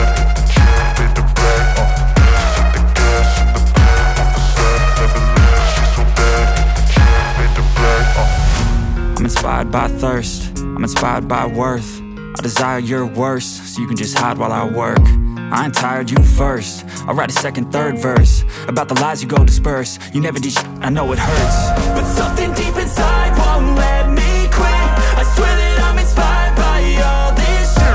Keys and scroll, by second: 1.7-7.1 typing, 8.7 KP_Divide, 9.0 KP_Divide, 9.5-11.2 typing, 9.6 KP_Subtract, 11.6 Return, 12.4 ., 13.4 w, 13.7 i, 13.9 Return, 14.5 KP_Divide, 14.7 KP_Divide, 15.0 ctrl+s, 21.5 Right, 21.9 space, 23.4 BackSpace, 24.6 ctrl+s, 27.6-27.9 typing.